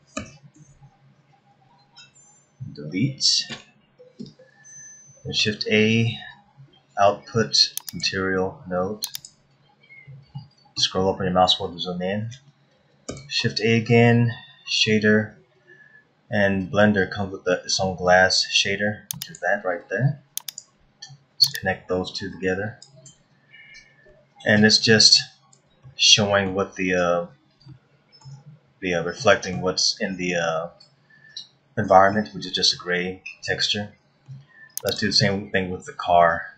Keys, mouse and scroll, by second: 0.1 a, 0.5 a, 3.6 Delete, 5.4 shift+a, 9.6-10.6 scroll up 8, 10.3 middle click, 11.0-11.9 scroll up 4, 13.1 shift+a, 21.5 click, 23.6 scroll up 1, 24.1 middle click, 25.8 shift+middle click, 27.6 middle click, 29.2 middle click, 32.3 middle click, 33.7 middle click, 34.8 click, 36.2-36.5 scroll down 7.